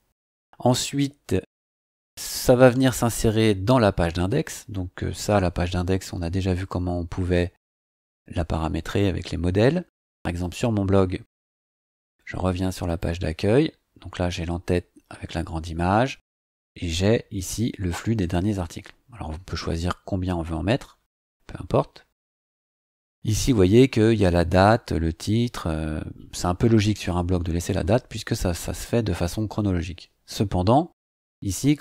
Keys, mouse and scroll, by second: 10.4 click, 11.4-12.4 scroll up 6, 12.9 click, 15.5-16.3 scroll down 4, 17.2 scroll down 2, 17.9 scroll down 2, 18.5-20.7 scroll down 8, 20.9-22.2 scroll up 6, 22.5 scroll up 2, 23.1 scroll up 2, 23.7 scroll up 2, 30.4 scroll up 2.